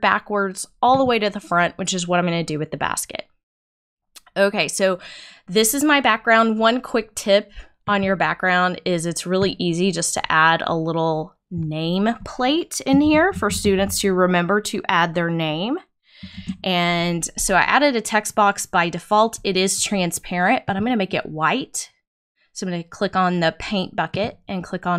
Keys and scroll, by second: 12.8-14.2 typing, 16.3 shift+;.